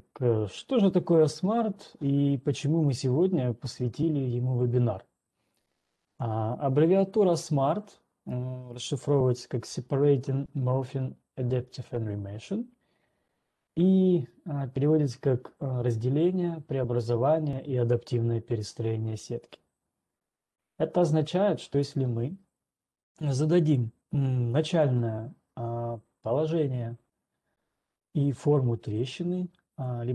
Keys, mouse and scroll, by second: 0.2-0.9 scroll, 1.2 scroll, 6.7 ctrl+2, 12.7 click.